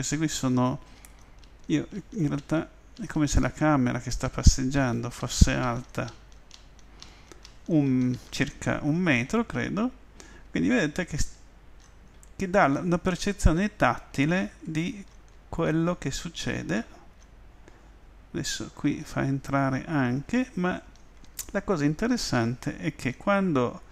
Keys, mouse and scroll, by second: 1.0 w, 1.9 w, 3.0 w, 4.2-4.8 typing, 10.5-15.9 typing, 13.8 middle click, 14.2 middle click, 18.4 w, 19.6 w, 20.3 w, 21.7 w, 22.9 w.